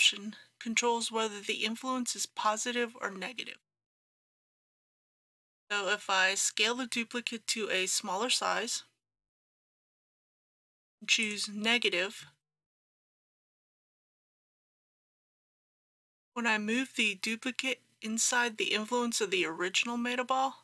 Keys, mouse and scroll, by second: 13.4-15.5 middle drag, 17.3 g.